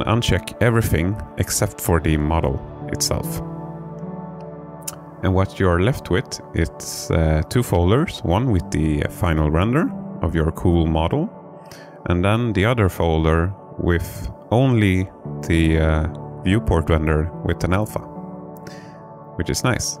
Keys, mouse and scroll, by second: 2.0 click.